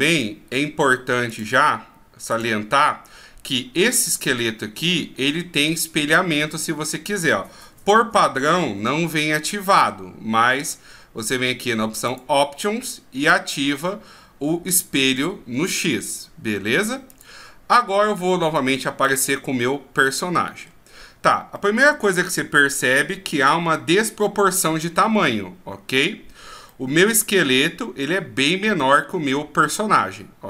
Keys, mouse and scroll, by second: 0.1 right click, 1.3 click, 5.5 right click, 7.7 g, 12.1 click, 17.1 click, 19.1 click, 20.0 middle click, 20.9-21.5 scroll down 2, 21.5 middle click, 21.5 scroll down 1, 26.3-26.8 scroll down 3, 26.7 middle click, 27.3-28.7 scroll up 5, 28.7 scroll down 2.